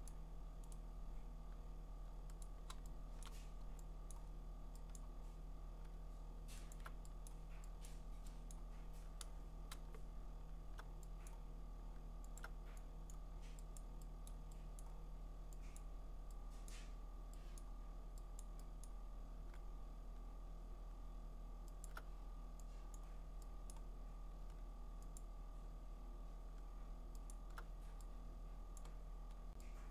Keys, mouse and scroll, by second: 0.1 click, 0.8 right click, 2.8 click, 3.2 click, 5.0 click, 6.7 alt+click, 6.8 alt+click, 7.3 click, 7.9 click, 8.5 click, 9.8 alt+click, 11.3 click, 12.4 alt+click, 13.1 click, 13.8 click, 14.3 click, 14.8 click, 15.4 alt+click, 15.8 click, 16.7 click, 17.6 click, 18.4 click, 18.9 click, 21.8-22.5 alt+click, 23.0 click, 23.7 click, 25.2 alt+click, 27.3 alt+click, 28.8 click.